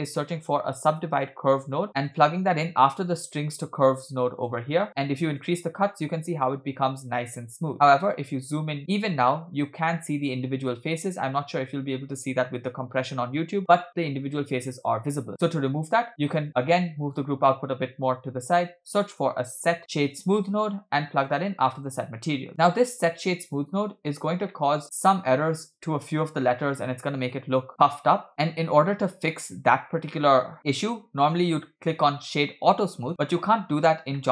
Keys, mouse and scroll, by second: 5.4 click, 7.9-8.3 shift+middle drag, 8.3 scroll up 2, 8.8-9.3 shift+middle drag, 14.6-15.3 scroll down 1, 15.3-16.1 scroll down 3, 15.3-16.1 middle drag, 16.1-16.4 scroll up 2, 16.5 click, 17.5 middle click, 18.4 shift+a, 22.7 click, 24.5-24.8 middle drag, 24.8-25.3 scroll down 3, 25.3-25.7 scroll up 1, 25.8-26.2 shift+middle drag, 26.3-26.6 scroll up 1, 28.3-29.3 middle drag, 31.5-32.4 scroll up 2, 33.1-33.5 scroll down 1, 34.2 middle click.